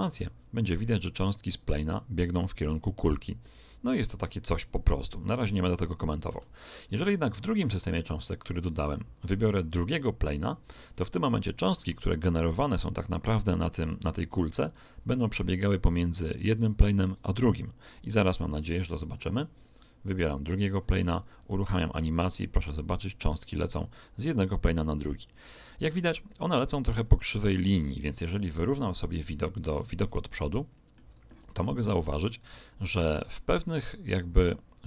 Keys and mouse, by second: 0.1 alt+a, 6.3 Escape, 8.2 click, 16.3-20.2 right drag, 19.5 click, 21.5 alt+a, 26.5-28.8 middle drag, 28.8 KP_1, 30.2 middle click, 33.1 Escape, 33.8 alt+a.